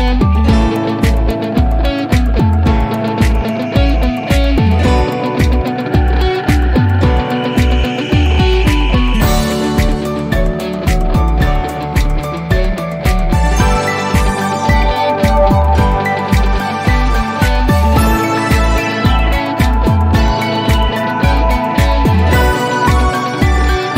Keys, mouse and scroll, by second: 0.2 p, 1.7-4.9 alt+middle click, 5.2-6.3 scroll down 1, 6.3 l, 7.7-9.4 scroll down 1, 9.4 click, 11.4 click, 12.8-13.7 scroll down 1, 15.0 click, 16.2 shift+click, 20.6 click, 23.1-23.9 scroll up 1.